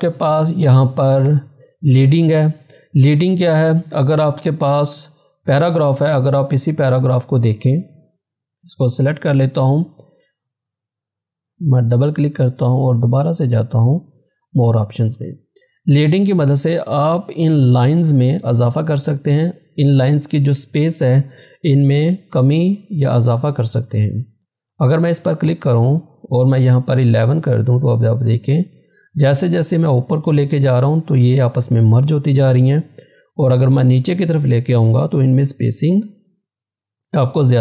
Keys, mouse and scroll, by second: 6.3 click, 6.3 click, 8.6 scroll down 1, 9.0 click, 24.5 click.